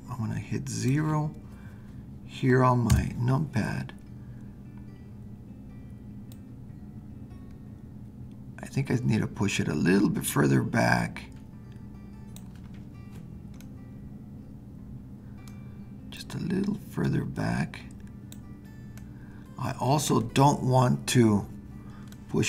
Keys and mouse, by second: 2.9 KP_0, 6.4-12.5 drag, 13.7-15.6 middle drag, 16.7-18.3 drag, 19.1-21.2 middle drag, 22.2-22.4 middle drag.